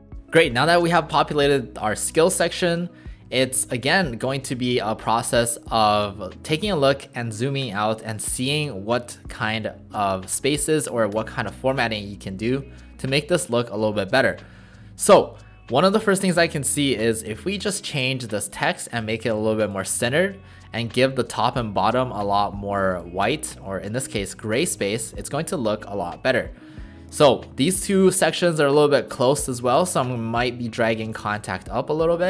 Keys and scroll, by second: 0.0-0.2 typing, 3.9 alt+space.